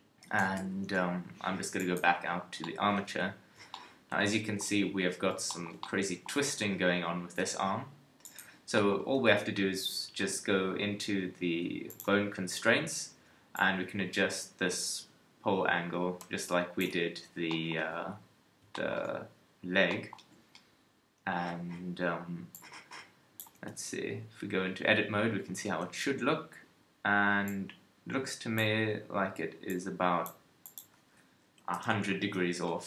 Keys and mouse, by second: 1.8-3.9 drag, 8.3-11.9 middle drag, 23.6-32.8 middle drag.